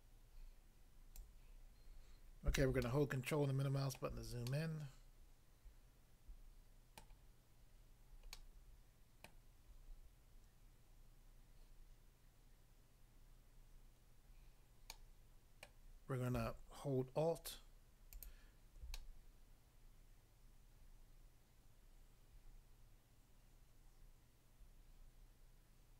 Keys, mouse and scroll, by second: 1.2 click, 1.3 click, 2.8 ctrl+middle click, 7.0 middle click, 8.3 middle click, 9.2 middle click, 14.9 middle click, 15.6 middle click, 18.1 alt+click, 19.0 middle click.